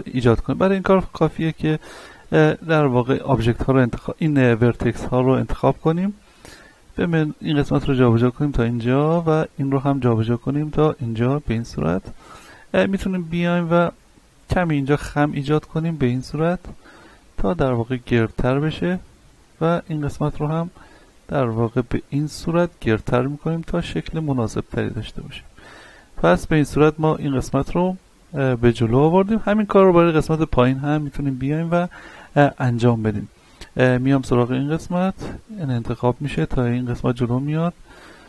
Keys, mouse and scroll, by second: 0.2 right click, 0.6 Tab, 1.1 ctrl+Tab, 1.7 click, 2.1 z, 2.5-2.8 scroll up 1, 2.8 a, 4.6-9.2 drag, 9.2 right click, 9.8 click, 10.9 z, 11.3-11.7 scroll up 1, 11.9 shift+middle click, 12.3-12.8 scroll up 1, 12.8 middle click, 13.7 right click, 14.7 right click, 17.1-17.6 scroll up 1, 17.8-19.5 drag, 19.5 right click, 19.9-21.1 middle drag, 20.8 click, 21.9-22.3 scroll down 1, 22.3 Tab, 22.9-26.7 middle drag, 26.7-27.1 scroll up 1, 28.5 scroll down 1, 28.7 shift+middle click, 29.4-29.7 scroll down 1, 30.1 shift+middle click, 30.8-31.2 scroll up 1, 32.0 shift+middle click, 32.4-32.8 scroll up 1, 33.0 Tab, 33.5 scroll up 1, 33.9 right click, 34.5-35.9 drag, 35.9 z, 36.8 shift+middle click, 37.5 right click, 38.1-38.2 drag.